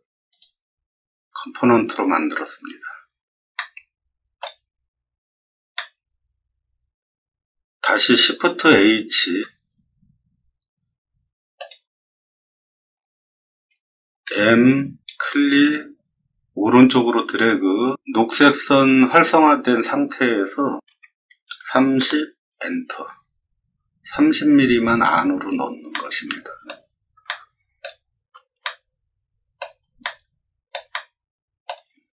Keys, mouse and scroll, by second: 0.2 click, 3.5 shift+middle click, 5.7-7.7 middle drag, 9.2 shift+h, 9.4-11.5 middle drag, 14.2 m, 20.8 3, 21.4 0, 21.9 Return, 25.9 scroll up 2, 26.0 middle click, 27.2-27.7 shift+middle drag, 28.6-29.5 shift+middle drag, 30.0 middle click, 30.9-31.6 shift+middle drag.